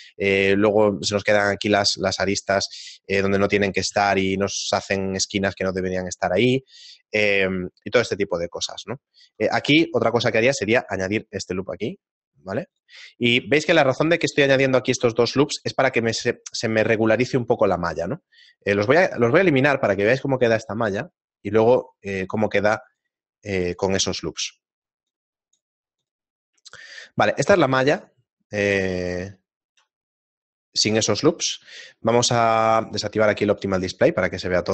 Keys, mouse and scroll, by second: 2.1 right click, 2.9 middle click, 4.1 shift+space, 5.3 shift+middle click, 6.1 ctrl+middle click, 6.9 shift+middle click, 8.8 Tab, 10.0 ctrl+r, 13.1 shift+middle click, 14.0 alt+right click, 14.5 alt+shift+right click, 17.5 shift+middle click, 19.1 ctrl+x, 19.5 middle click, 19.9 Tab, 21.5 click, 22.8 click, 27.0 click, 27.0 shift+middle click, 28.0 shift+middle click, 29.3 shift+middle click, 32.6 click, 33.6 click.